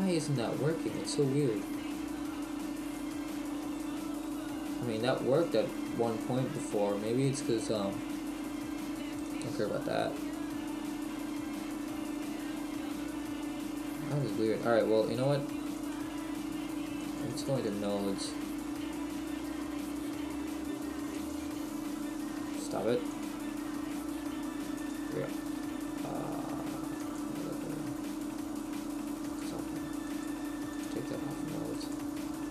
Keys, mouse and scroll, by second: 17.7 click, 23.2 click, 24.7 click.